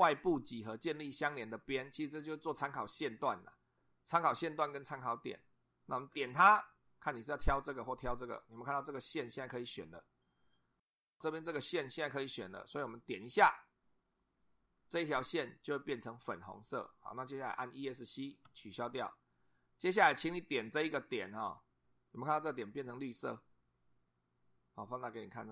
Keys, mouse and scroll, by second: 6.1 click, 13.7 click, 18.4 Escape, 21.6 click, 22.8-23.1 scroll up 2, 25.2 scroll up 2.